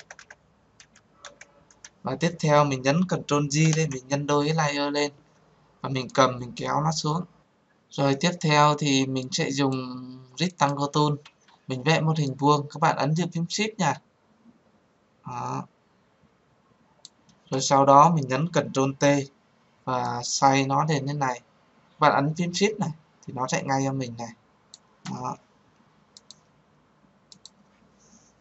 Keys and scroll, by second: 3.2 ctrl+j, 18.9 ctrl+t.